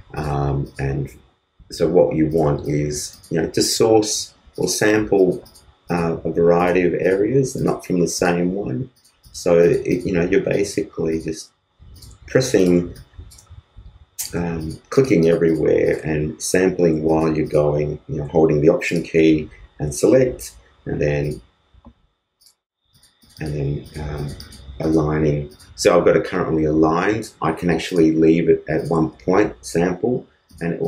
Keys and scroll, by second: 12.8 alt+space, 13.8 alt+space.